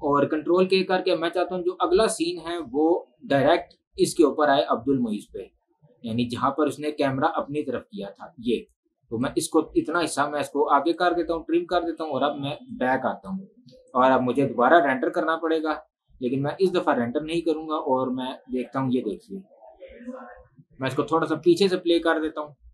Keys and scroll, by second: 22.3 space.